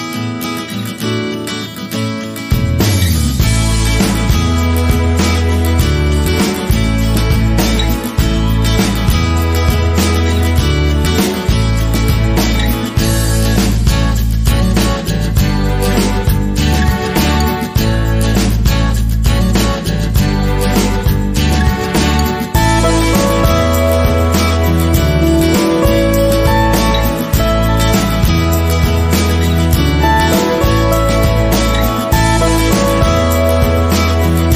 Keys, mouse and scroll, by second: 1.0-1.7 middle drag, 1.7 click, 3.5 s, 7.7 click, 8.1 scroll up 1, 8.9-10.2 shift+middle drag, 10.2 Delete, 15.5 scroll down 1, 16.0-17.4 scroll down 3, 16.2 Delete, 16.2 click, 17.4-26.7 middle drag, 18.3-18.7 scroll down 2, 19.7-20.3 scroll down 2, 20.3 scroll down 1, 20.6-22.0 scroll up 2, 22.0 scroll up 1, 22.2 g, 26.7 click, 27.8 KP_1, 28.5 scroll up 1, 29.3-29.8 scroll down 1, 30.6 g.